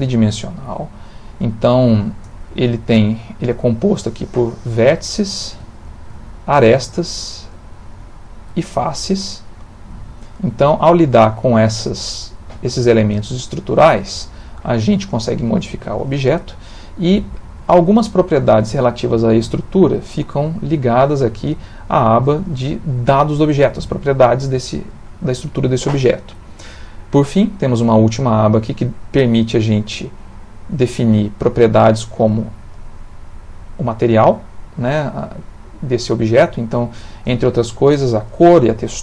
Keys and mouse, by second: 2.2 Tab, 2.9 click, 3.4 g, 5.8 shift+click, 7.3 shift+click, 8.0 shift+click, 9.0 g, 10.7 click, 10.9 g, 11.9 click, 12.1 g, 13.0 click, 13.1 g, 14.0 click, 14.2 g, 15.7 Tab, 27.4 click, 31.0 click, 32.7 click.